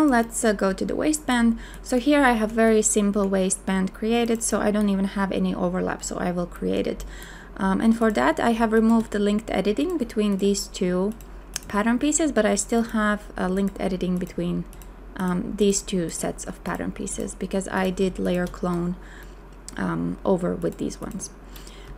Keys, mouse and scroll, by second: 8.7 shift+click, 18.2 shift+click.